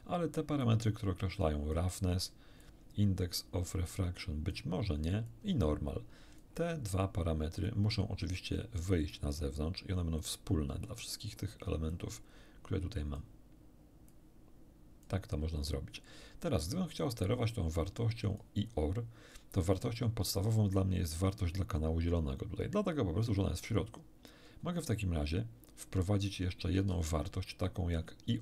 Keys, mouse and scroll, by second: 0.6-1.9 drag, 2.6-4.7 drag, 5.3-6.6 drag, 7.7-9.3 drag, 10.2-11.2 drag, 11.9-13.3 drag, 14.1-15.2 drag, 17.5-18.6 drag, 19.8 middle click, 24.8-26.5 drag, 26.9 shift+a.